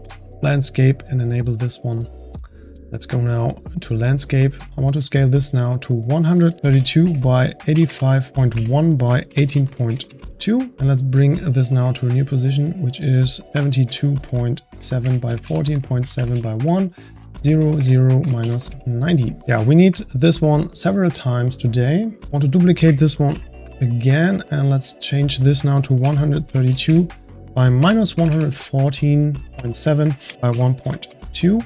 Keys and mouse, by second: 2.1 click, 2.1 shift+a, 5.8-8.3 drag, 12.0-17.0 drag, 19.4 click, 20.1-21.3 drag, 22.3 click, 23.2 shift+d, 24.6-28.2 drag, 28.2 KP_1.